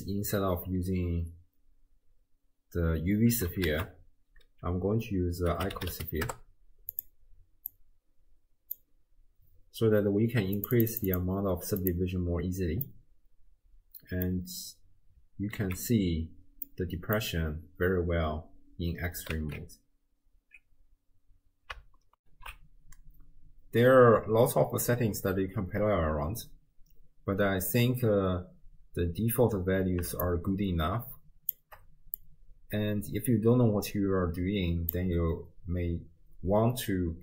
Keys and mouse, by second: 3.2 x, 3.7 ctrl+a, 7.7-8.8 drag, 10.6 click, 10.8 click, 11.8 click, 12.9-14.3 middle drag, 15.6 alt+z, 16.7 click, 19.3 alt+z, 30.3-31.6 shift+drag, 32.2-34.9 drag.